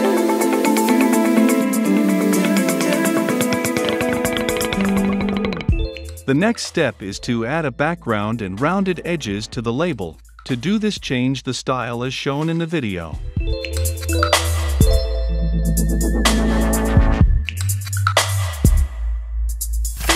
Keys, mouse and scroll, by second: 4.8-5.9 drag, 5.9 Return, 6.0 e, 6.4 Return, 7.0-8.3 right drag, 8.3-11.0 drag, 11.1 shift+q.